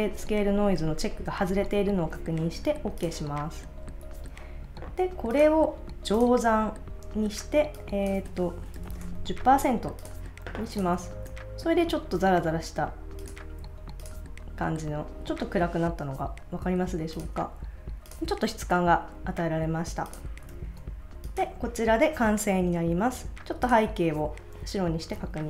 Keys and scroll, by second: 8.5-9.4 typing, 11.0 super+s, 20.5 super+s.